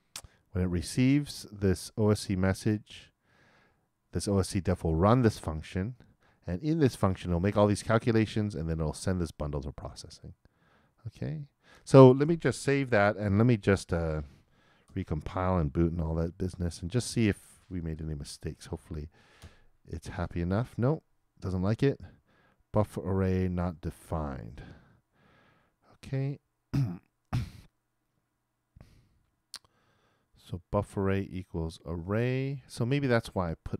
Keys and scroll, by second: 12.8 super+s, 14.9 shift+super+l, 17.0 super+b, 19.4 super+Return.